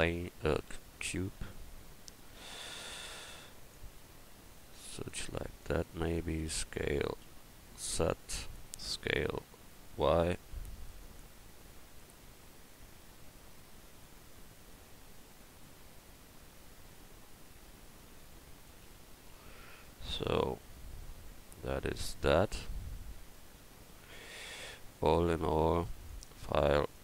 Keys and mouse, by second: 0.5 s, 3.2-6.4 drag, 4.1 s, 6.4 s, 9.0 s, 18.8 a.